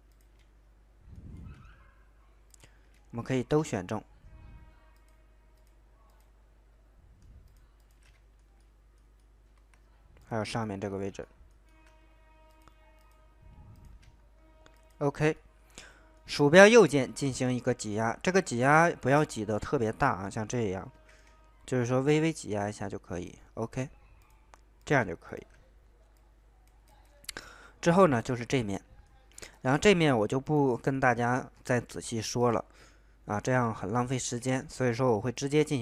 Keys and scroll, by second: 3.2 ctrl+z, 20.9 ctrl+z.